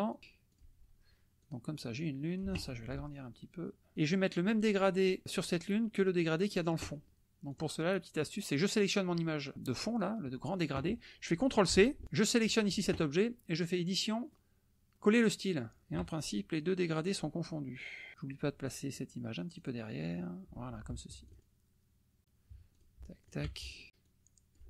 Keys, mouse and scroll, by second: 0.1 click, 0.5 click, 1.5 click, 1.8 click, 3.4 ctrl+shift+click, 5.4 drag, 6.1 click, 7.5 click, 8.5 click, 12.0 ctrl+c, 12.1 ctrl+click, 13.6 click, 15.2 click, 16.3 shift+click, 18.1 click, 19.6 click, 21.4 ctrl+click, 22.8 click, 23.2 shift+click, 23.6 shift+click, 24.0 click.